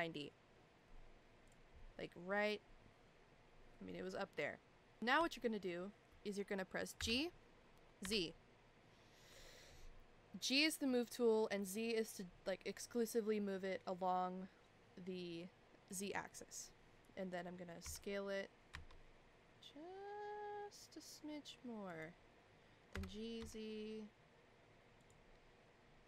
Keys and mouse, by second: 5.0 shift+middle click, 7.0 g, 17.8 s, 22.9 g.